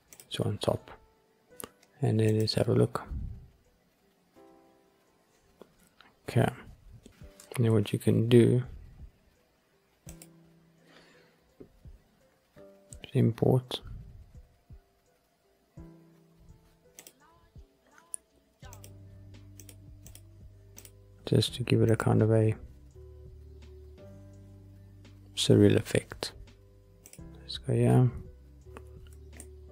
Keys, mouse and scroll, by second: 0.0 click, 3.5 click, 7.6 shift+a, 10.0-17.2 drag, 27.0-28.8 drag, 28.8 g, 29.3 middle click.